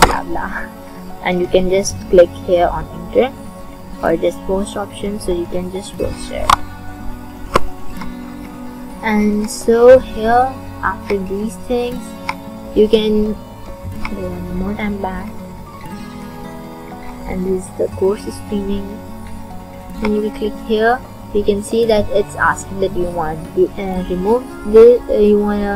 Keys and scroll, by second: 0.0-0.1 typing, 6.5 BackSpace, 7.0 BackSpace.